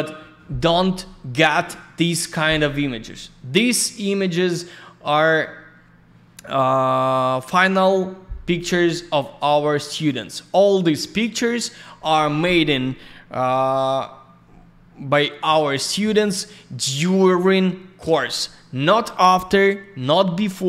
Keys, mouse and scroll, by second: 0.8-1.5 scroll down 1, 7.0 scroll down 1, 11.2-12.4 scroll up 1, 15.1 middle click, 15.9 scroll up 1, 16.6 scroll down 1.